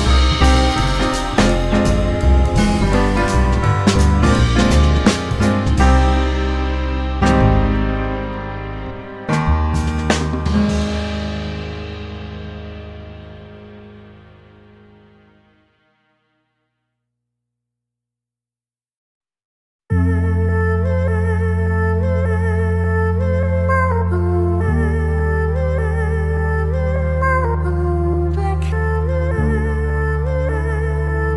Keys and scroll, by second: 2.8 Return, 2.8 0, 4.5-5.4 typing, 12.1 F4, 12.9 F4, 16.8 F4, 18.9 alt+F4, 20.1 F4, 22.4 ctrl+t, 23.1 F4, 24.9 2, 25.7 ctrl+r, 26.1-27.0 typing, 27.7 ctrl+c, 28.4 1, 29.1 Delete, 29.4 F3, 30.7 F4.